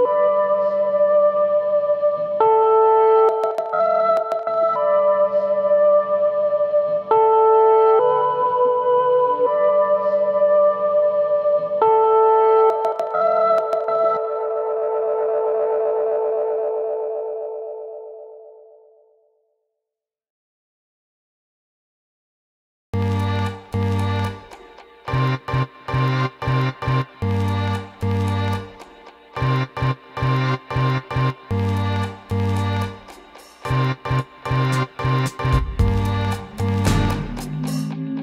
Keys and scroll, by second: 19.4 ctrl+8.